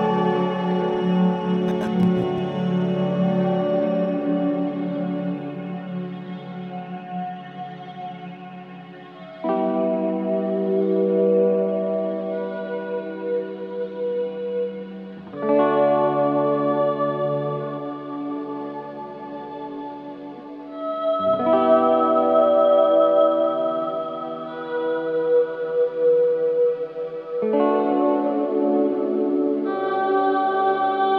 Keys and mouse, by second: 3.2 typing, 4.4 alt+shift+click, 5.0 ctrl+alt+click, 5.5 alt+shift+click, 6.2 click, 6.9-8.5 drag, 8.7-11.6 drag, 12.0-14.1 drag, 14.5 typing, 15.7-19.2 alt+shift+drag, 21.4 click, 22.7-23.0 typing, 24.6-26.6 drag, 26.6 g, 26.9 x, 28.3-29.3 drag, 29.3 typing, 29.8 click.